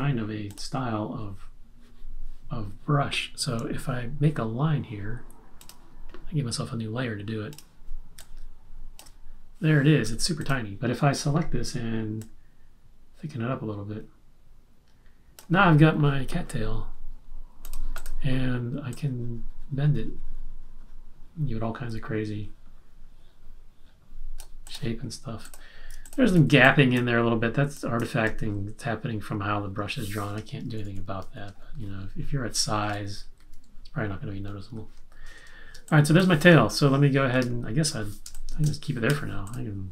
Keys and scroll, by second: 10.0 v, 26.3 z, 30.6 super+-, 31.2 super+-, 32.8 super+-, 34.4 super+-, 34.5 super+=, 35.8 space, 37.3 super+-, 38.2 space, 39.1 v.